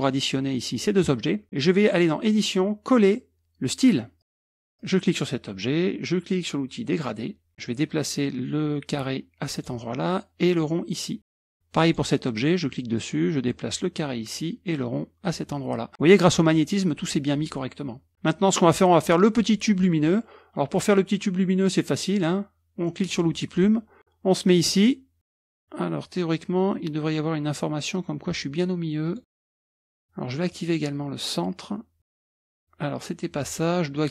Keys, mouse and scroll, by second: 1.6 click, 4.2 click, 4.6 click, 6.9 click, 8.9 click, 10.6-11.6 drag, 11.8 click, 13.5-14.7 drag, 15.3 click, 18.1 click, 23.1 click, 29.1 click, 30.5 click, 32.3 click, 33.4-34.0 drag.